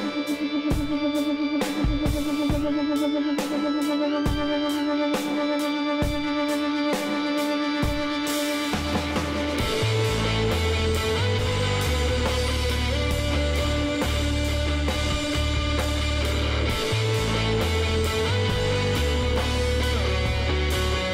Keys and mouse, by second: 1.9-4.8 middle drag, 3.3 s, 6.0-8.0 drag, 6.8-8.0 middle drag, 7.8 KP_1, 9.7 KP_3, 13.1-14.4 middle drag, 15.4-17.8 middle drag, 17.8 KP_9, 18.8-21.1 middle drag, 20.9 e.